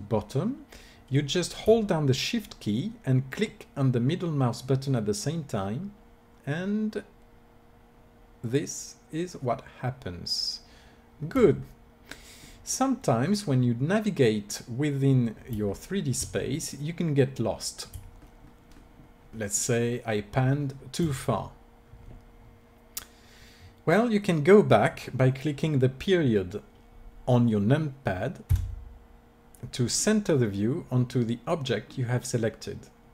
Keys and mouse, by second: 11.7-14.6 middle drag, 15.6-19.1 middle drag, 28.5 KP_Decimal, 30.0-33.1 middle drag.